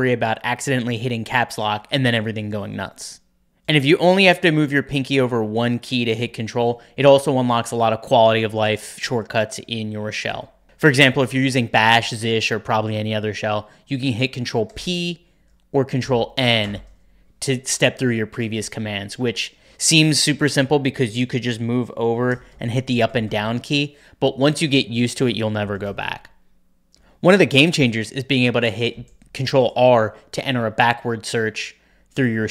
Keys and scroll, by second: 14.6 ctrl+p, 15.3 ctrl+p, 15.9 ctrl+n, 16.5 ctrl+n, 22.2 Up, 22.4 Down, 22.6 Up, 22.7 Up, 22.9 Down, 23.0 Down, 23.2 Down, 26.6-27.4 typing, 29.3 ctrl+r.